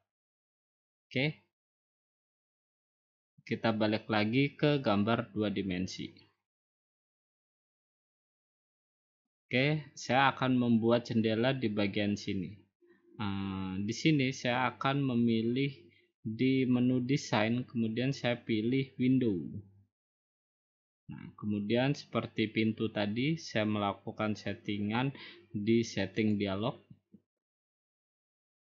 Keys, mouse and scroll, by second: 7.0 click, 8.4 middle click, 8.6 middle click, 8.9 middle click, 10.5 middle click, 10.7 middle click, 19.3 click, 26.3 click.